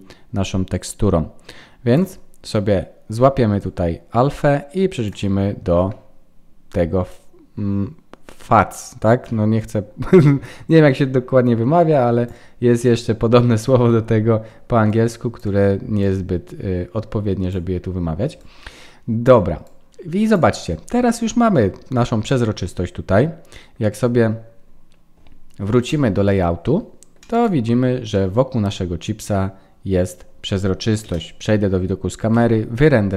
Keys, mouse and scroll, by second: 25.9 click, 26.6 middle click, 28.0 middle click, 28.0 click, 30.1-31.0 scroll down 1, 31.0 scroll down 1, 31.0 KP_0, 32.4 F12.